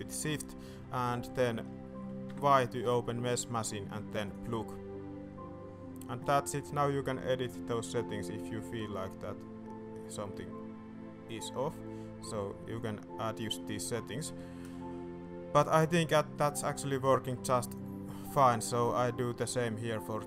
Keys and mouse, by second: 2.2 y, 8.1-9.2 drag, 9.3-13.1 drag, 16.5 middle click, 16.9 middle click, 18.3 click.